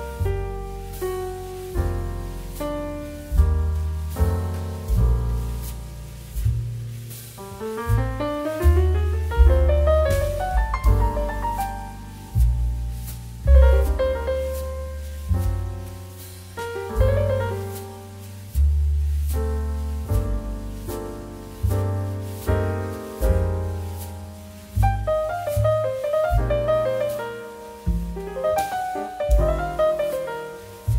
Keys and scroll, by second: 0.5 space, 2.2 space, 4.5 space, 7.3 2, 7.9 space, 10.3 space, 13.0 space, 14.5 space, 16.4 space, 19.7 space, 25.5 space, 27.5 space, 28.7 z.